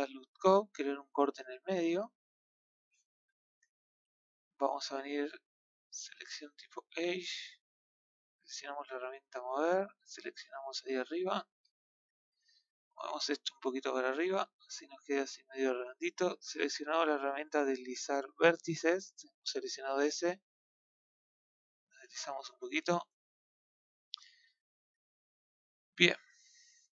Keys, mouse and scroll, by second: 0.0 click, 1.2 click, 3.1 ctrl+z, 3.6-6.4 middle drag, 6.4 click, 9.3 click, 11.9 KP_1, 13.7 click, 17.3 click, 18.8 middle click, 20.3 click, 22.8-23.8 middle drag, 23.8-24.4 scroll down 3, 24.4 middle click, 25.3-26.2 scroll up 1, 26.2-27.0 scroll down 1.